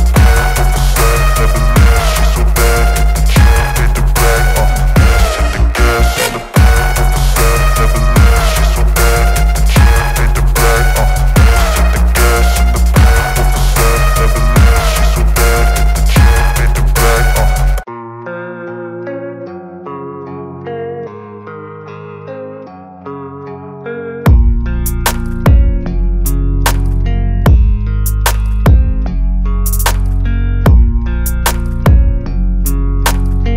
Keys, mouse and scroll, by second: 10.3-12.3 drag, 19.4-21.1 drag, 22.2 Return, 27.7 click.